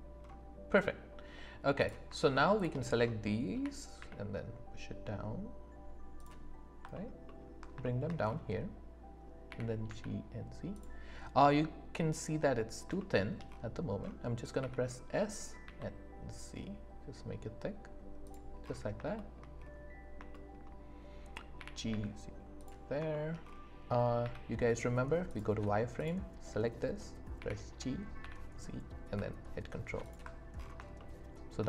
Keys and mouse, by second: 1.8 click, 2.6 shift+click, 3.5 g, 4.0 z, 6.2 click, 7.8 shift+click, 9.5 g, 9.8 z, 10.7-11.8 drag, 13.0 shift+click, 14.6 s, 15.6 z, 18.2 click, 19.1 shift+middle click, 20.3 shift+middle click, 21.5 g, 21.9 z, 23.1 shift+middle click, 24.2 z, 26.0 click, 27.3 g, 28.2 z, 30.0 ctrl+click, 31.0 shift+click.